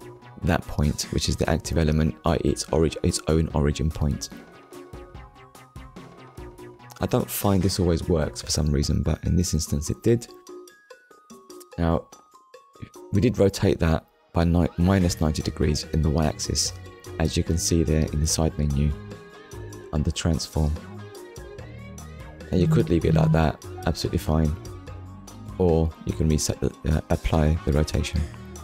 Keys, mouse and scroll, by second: 8.6 click, 9.6 click, 10.2 scroll down 1, 11.2 scroll down 2, 11.9 shift+middle click, 13.0 middle click, 14.7 shift+middle click, 19.4 shift+middle click, 21.6 KP_1, 22.7 ctrl+s, 25.7 click, 26.7 middle click, 27.4 scroll up 1, 28.4 KP_1.